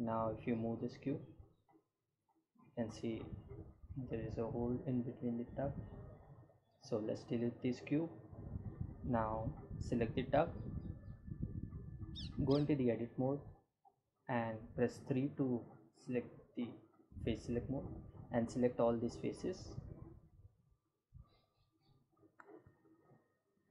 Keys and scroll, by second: 4.6 x, 5.4 Return, 11.1 Tab, 13.3 3.